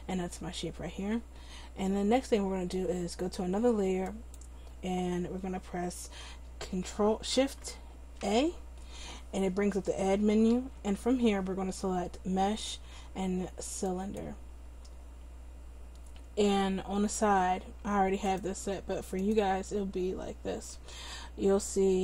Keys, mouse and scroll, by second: 4.1-8.2 drag, 8.2 shift+a, 10.6 shift+a, 18.4-22.0 drag.